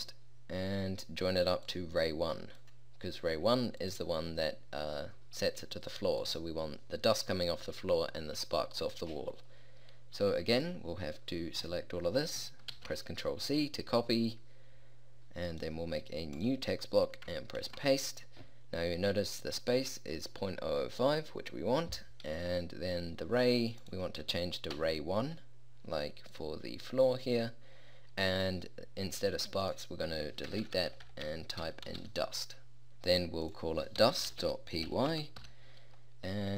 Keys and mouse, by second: 1.7-3.6 drag, 3.9-5.6 drag, 6.3-8.0 drag, 10.7-12.6 drag, 12.8 ctrl+c, 15.6-17.5 drag, 17.7 ctrl+v, 23.9 click, 24.8 1, 30.6-32.1 typing.